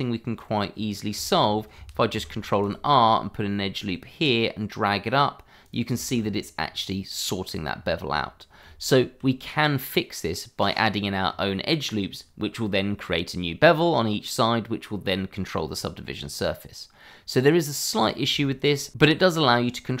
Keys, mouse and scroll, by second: 0.7-1.1 scroll down 1, 1.2 shift+middle click, 1.3 middle click, 2.3 ctrl+r, 2.6 click, 5.6 click, 6.0 middle click, 6.2-6.6 scroll up 1, 7.7-8.1 scroll down 1, 8.6 Tab, 11.2-13.3 scroll up 1, 15.7 scroll down 1, 18.4 shift+middle click.